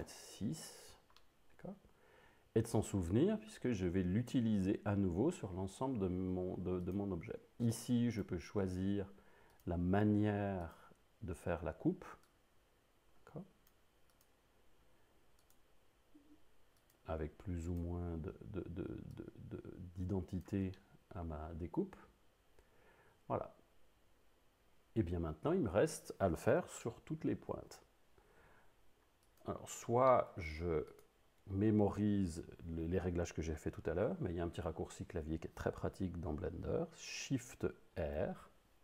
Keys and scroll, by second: 0.0 Return, 38.0 shift+r.